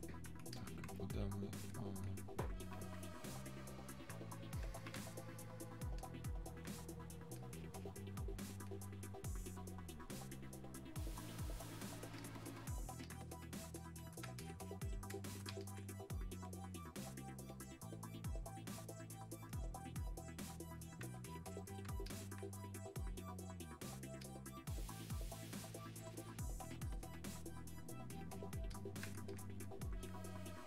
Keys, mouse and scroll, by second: 6.1 alt+click, 9.8 click, 12.3 click, 21.6 alt+click.